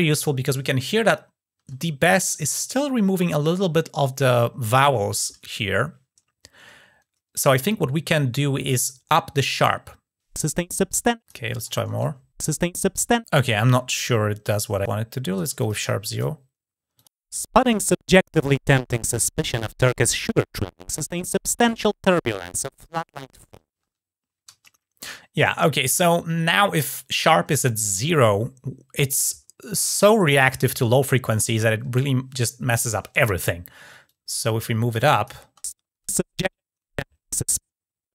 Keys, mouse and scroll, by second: 11.3 click, 14.8-15.2 drag, 15.4 click, 16.7 click, 33.8 click, 34.9 click.